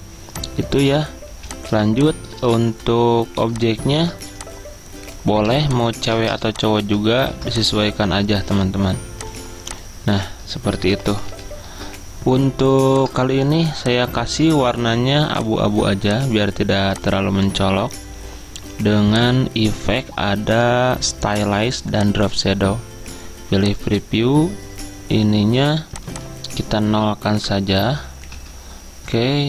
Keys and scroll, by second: 1.4 typing, 3.4 typing, 7.4 ctrl+x, 27.6 Caps_Lock, 28.4 Tab.